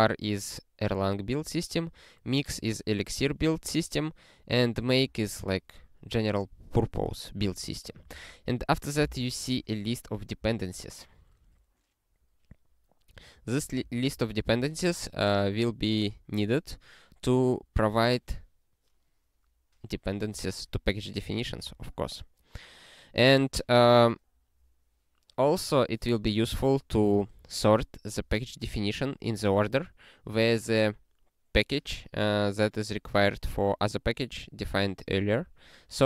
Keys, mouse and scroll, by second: 1.9 click, 4.6 click, 4.9 double click, 8.2 click, 9.1 ctrl+f, 13.2 click, 13.9 ctrl+alt+@, 14.9 ctrl+g, 21.7 ctrl+a.